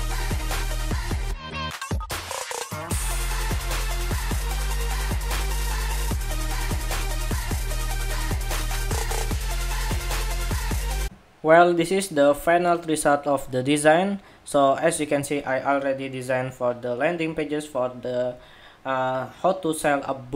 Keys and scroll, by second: 0.2 ctrl+c, 1.3 ctrl+c, 2.9 ctrl+c, 5.9 super+s, 7.6 super+=, 10.9 shift+super+2.